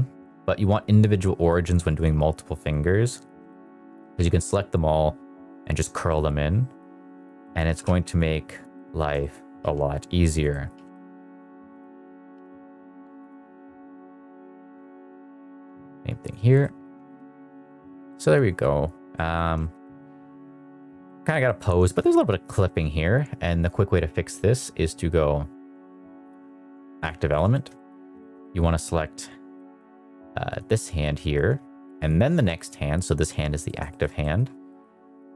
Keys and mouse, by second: 1.7 middle drag, 2.5 shift+click, 3.1 shift+click, 3.4 middle click, 3.6 r, 4.1 z, 6.0 middle click, 7.1 click, 7.3 middle click, 7.6 r, 7.8 z, 8.6 middle click, 9.1 shift+middle click, 9.5 r, 10.4 middle click, 10.6 r, 10.9 z, 11.3 click, 11.7 click, 12.3 r, 12.4 z, 13.2 drag, 13.5 click, 13.7 middle drag, 14.3 click, 15.5 r, 16.2 click, 16.5 middle drag, 17.0 middle drag, 17.3 middle click, 17.6 shift+middle drag, 18.0 middle drag, 19.0 middle drag, 19.5 shift+middle drag, 19.7 middle click, 20.9 middle drag, 21.3 middle drag, 21.7 shift+middle drag, 22.4 shift+middle click, 23.6-27.0 drag, 27.4 shift+middle drag, 27.6 middle click, 28.1 shift+middle drag, 28.3 middle drag, 29.5 middle drag, 30.4 click, 31.9 shift+click, 32.4 middle drag, 33.5 middle drag, 33.8 shift+middle drag, 34.1 middle drag, 34.6 middle drag.